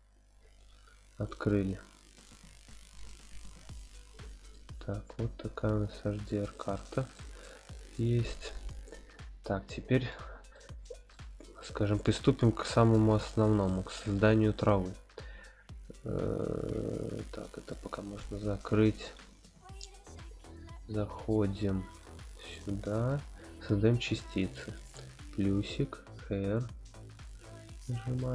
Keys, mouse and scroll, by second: 1.3 click, 3.3 click, 4.5-6.4 middle drag, 6.7-7.1 shift+middle drag, 7.4-8.0 middle drag, 10.0 scroll down 1, 10.5-11.1 middle drag, 10.5 scroll down 1, 11.3 scroll up 1, 12.0 scroll up 2, 12.0-12.9 middle drag, 13.6-14.6 shift+middle drag, 17.7 click, 19.0-19.7 scroll down 1, 19.8-20.2 shift+middle drag, 19.8-20.2 scroll down 1, 21.9 click, 24.5 click, 27.3 click.